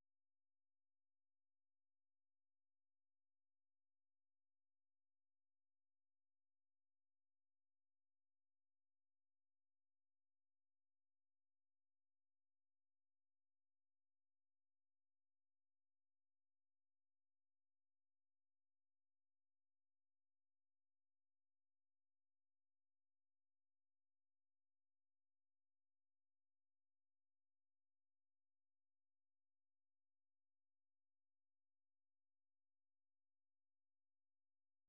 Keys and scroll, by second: 21.3 ctrl+c, 22.6 super+1, 23.3-27.6 typing, 32.5 Up, 32.9 Up, 33.6 Return.